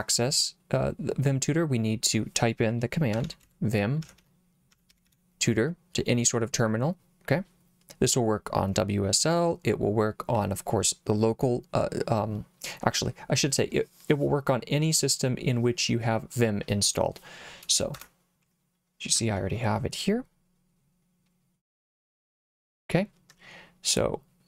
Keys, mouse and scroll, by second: 2.9-5.6 typing, 17.9 Return.